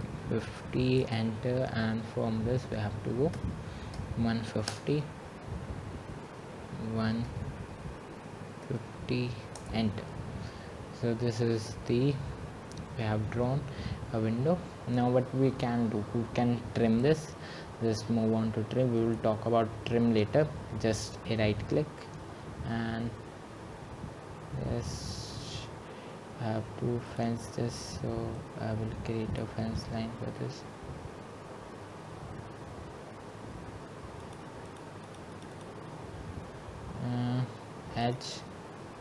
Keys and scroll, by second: 3.7 Return, 5.0 typing, 7.6 BackSpace, 9.7-10.4 typing, 13.1 Return.